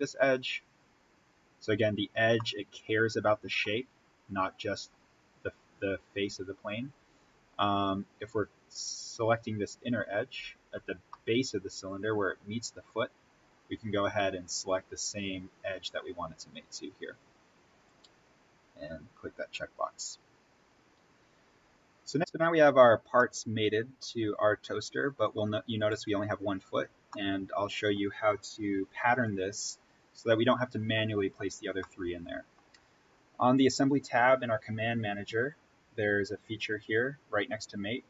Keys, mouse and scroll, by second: 0.1-1.5 scroll up 1, 2.4-3.9 middle drag, 3.9-4.2 scroll down 1, 9.1-11.0 scroll up 1, 11.0-13.3 middle drag, 13.3-13.9 scroll down 1, 15.7 click, 18.8-19.2 scroll up 1, 22.1 click, 22.3-23.1 scroll down 1, 23.1-26.5 middle drag, 26.5-27.0 scroll up 1, 27.0-30.2 middle drag, 31.7-38.0 middle drag.